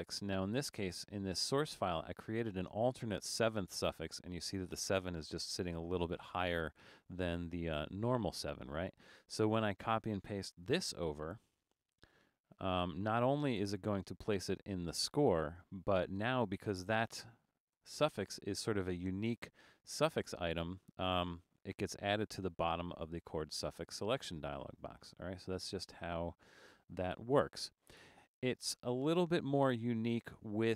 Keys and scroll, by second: 11.0 super+c, 14.0 super+v, 17.9 Return, 27.3 super+z.